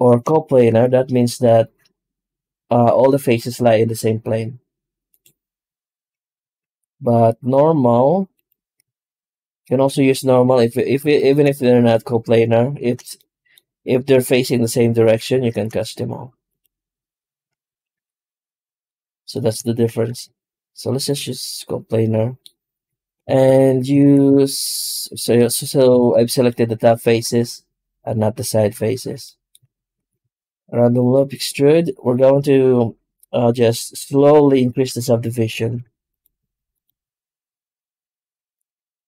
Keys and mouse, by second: 0.6 shift+g, 6.4 ctrl+z, 7.4 e, 9.0 shift+g, 11.1 shift+middle click, 11.5 middle click, 13.1-15.2 middle drag, 15.4 shift+g, 17.6 ctrl+z, 17.8 ctrl+z, 19.9 shift+g, 22.6 Tab, 23.2 alt+shift+z, 23.8 shift+q, 25.0 Tab, 25.8 alt+shift+z, 26.2 middle click, 28.9 Tab, 29.5 alt+shift+z, 29.8 shift+q.